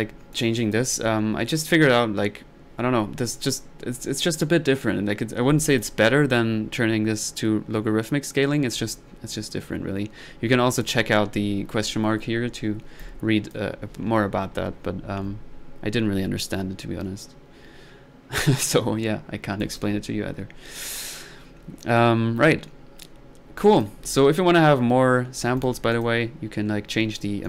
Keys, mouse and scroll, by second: 0.3-0.9 drag, 3.5-4.1 middle drag, 5.7 click, 9.8-10.2 middle drag, 13.0-13.6 drag, 19.2-19.6 middle drag, 19.6 click, 22.3-22.9 middle drag, 23.6-23.9 drag, 25.3 middle click, 25.6 click.